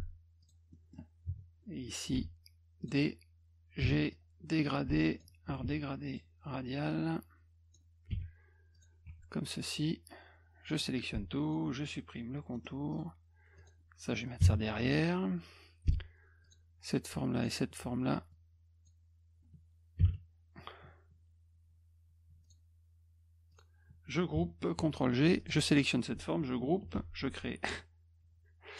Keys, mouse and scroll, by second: 0.4 click, 0.7 middle click, 2.1 d, 2.8 click, 3.9 g, 4.1-5.2 drag, 5.7 z, 6.1 click, 6.9 click, 8.7 click, 9.1 F1, 10.8 click, 12.5 middle click, 12.9 click, 13.6 click, 16.4 click, 17.4 shift+click, 18.3 click, 22.4 shift+click, 23.5 shift+click, 24.8 g, 25.4 click, 26.9 g.